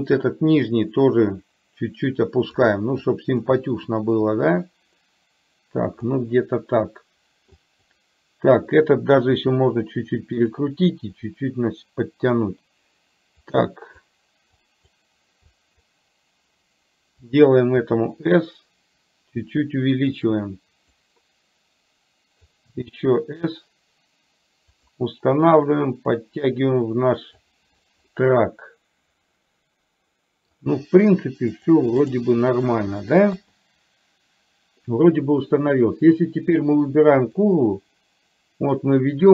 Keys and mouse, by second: 0.8-2.7 drag, 3.0 click, 4.4-6.2 drag, 7.7 click, 9.4 r, 11.3 click, 11.5-12.5 drag, 13.7 click, 14.7 click, 15.5 click, 17.8 s, 21.0-22.5 drag, 22.7 s, 25.4-27.5 drag, 28.2-30.5 middle drag, 31.5 click, 37.4-39.3 drag.